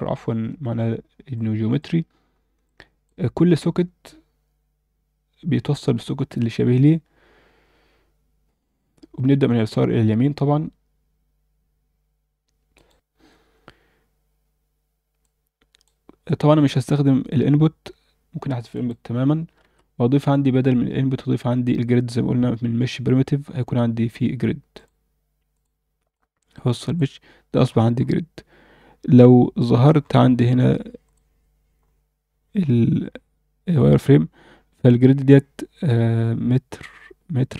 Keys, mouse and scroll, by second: 1.3 click, 2.6 click, 15.2 click, 18.7 click, 19.1 x, 19.6 shift+a, 26.1-26.9 drag, 27.6 scroll up 1, 29.0 scroll down 1, 29.6-30.0 scroll down 1, 31.1 click, 31.1-31.8 scroll down 5, 31.8-33.4 scroll up 1.